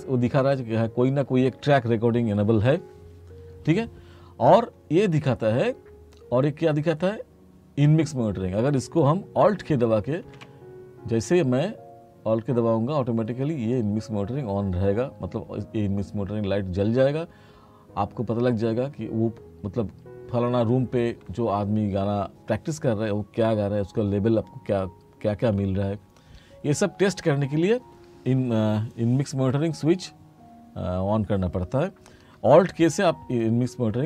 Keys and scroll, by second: 10.1 k.